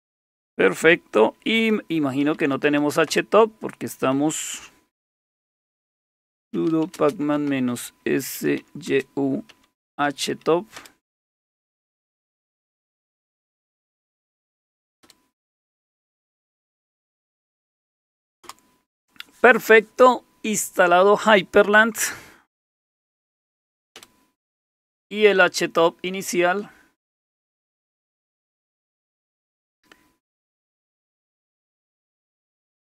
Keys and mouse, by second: 1.6-3.2 typing, 5.1-10.8 typing, 11.8-15.0 typing, 18.4 Return, 22.7-24.1 typing, 31.2 click, 32.2 click.